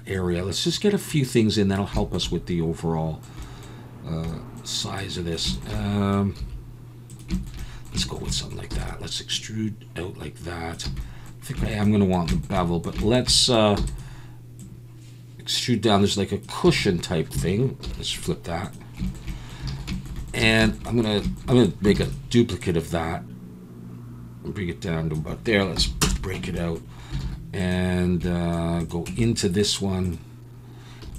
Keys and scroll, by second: 6.4 s, 8.7 e, 10.9 a, 13.8 e, 16.7 a, 17.8 alt+n, 19.8 alt+a, 20.4 a, 22.0 shift+d, 25.8 p, 26.3 Tab, 27.2 alt+a, 27.3 p, 29.1 Tab, 31.0 3.